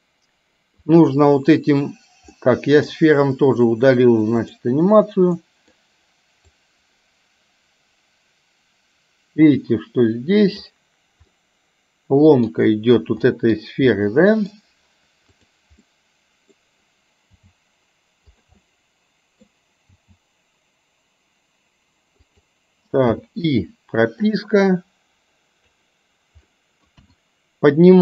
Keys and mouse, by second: 1.0 click, 2.3 middle click, 4.6 click, 5.5 middle click, 6.7-10.8 drag, 11.3-12.5 middle drag, 13.3 middle click, 14.1 middle click, 15.8 middle click, 17.3 g, 18.7 middle click, 20.1 g, 23.2 i, 24.5-25.8 drag, 26.6 middle click, 27.0 KP_1.